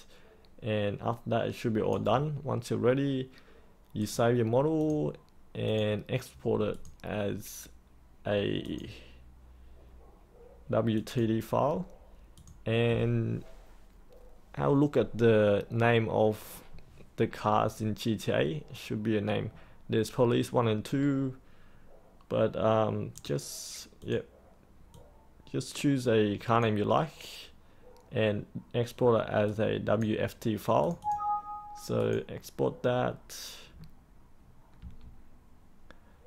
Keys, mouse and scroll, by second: 3.9-7.7 drag, 20.5-33.0 drag, 34.8 3.